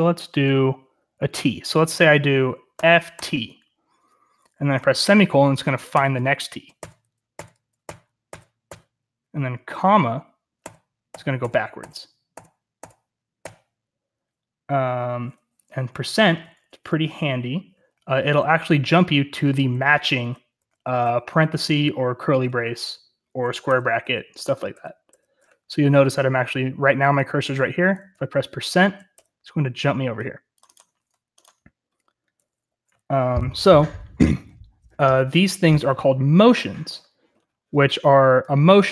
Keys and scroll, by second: 2.4-3.6 typing, 6.7-8.2 typing, 10.5-12.2 typing, 13.3 ,, 16.1-16.7 typing, 19.5-25.5 typing, 29.1 %, 32.6 j, 32.8 j, 33.6 j, 34.8 j, 35.5-36.8 k.